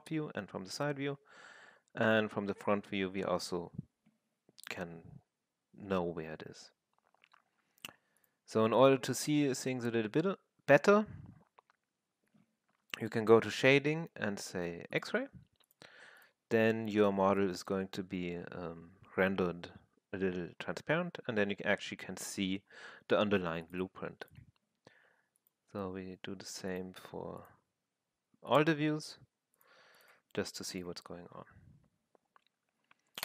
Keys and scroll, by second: 17.3 f, 18.8 w.